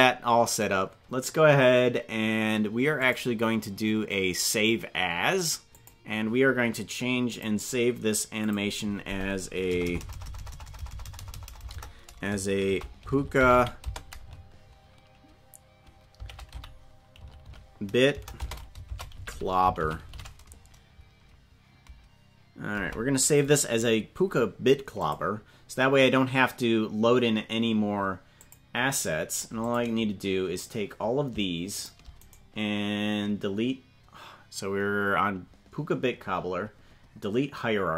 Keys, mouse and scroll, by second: 3.0-6.0 ctrl+drag, 28.4 click, 29.6 click, 31.7 shift+click, 32.2-37.9 right drag.